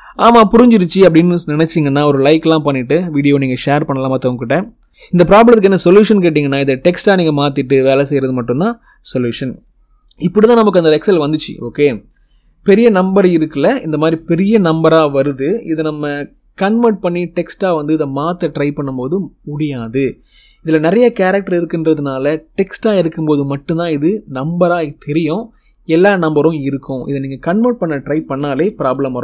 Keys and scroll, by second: 28.5 ctrl+c.